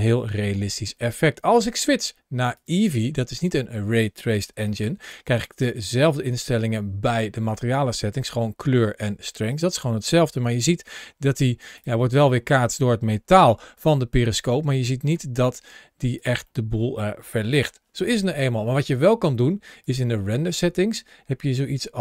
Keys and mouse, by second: 1.5-2.6 drag, 4.5 shift+middle click, 6.1 click, 10.3 g, 11.5 click, 12.4 middle click, 13.0 g, 14.3-14.9 middle drag, 14.9 g, 15.9 click, 16.4-17.5 middle drag, 19.6 click.